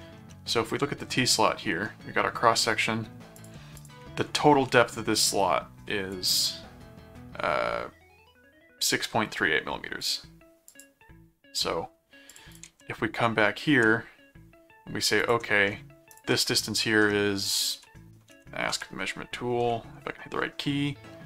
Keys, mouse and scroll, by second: 0.3 middle click, 3.4 ctrl+click, 4.5 m, 6.1 click, 10.0 click, 10.7 click, 12.3 ctrl+click, 12.6 ctrl+Tab, 15.2 click, 15.5 ctrl+middle click, 16.1 ctrl+click, 16.3 middle click, 17.8-19.6 typing.